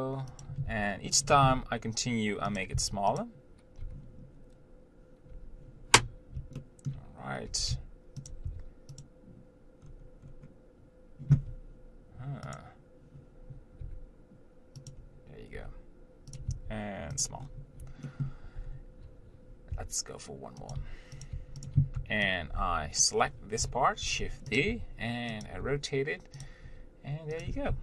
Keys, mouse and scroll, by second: 0.9 e, 1.7 g, 3.0 s, 4.1 n, 5.5 n, 6.8 shift+middle click, 7.8 g, 8.7 e, 10.0-10.4 scroll down 1, 10.4-11.6 scroll up 1, 11.6-14.0 scroll up 1, 14.0 scroll up 1, 14.2 g, 15.8 g, 16.7 s, 17.7-18.3 scroll down 1, 18.3 shift+middle click, 18.9 scroll up 1, 19.9 e, 21.0 g, 21.6 s, 24.3 shift+d, 24.9 r, 25.9 g, 26.9 r, 27.7 g.